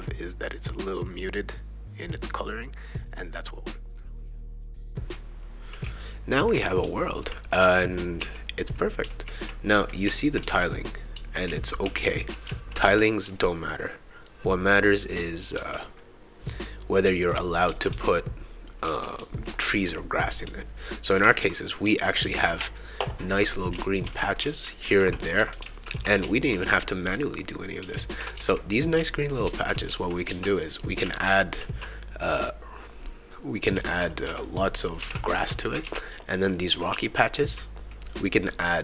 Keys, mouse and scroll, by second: 0.1 click, 0.2 shift+click, 2.0 click, 2.1 click, 2.3 click, 2.6 click, 3.3 click, 3.8 click, 4.4-11.6 typing, 4.5-9.5 shift+right drag, 12.8-14.3 shift+right drag, 12.8 shift+w, 15.2-22.6 shift+right drag, 15.5 shift+w, 17.0-19.2 typing, 20.4 shift+w, 21.2 shift+e, 21.8 shift+w, 22.2 shift+w, 23.3-24.9 right drag, 23.7-26.2 typing, 25.9 shift+right click, 27.9-31.7 typing, 33.7-36.9 typing, 35.6 shift+right click, 36.5-37.6 right drag.